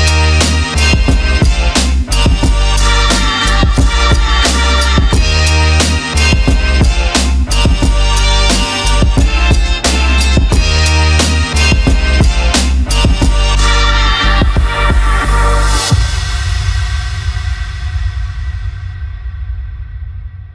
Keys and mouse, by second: 0.5-0.9 drag, 5.4 ctrl+middle click, 9.0 click, 12.3 click, 12.6 Tab, 14.4 middle click, 15.1 click, 16.6 3, 17.1 click, 17.8 middle click, 18.6 shift+click, 19.5 shift+click.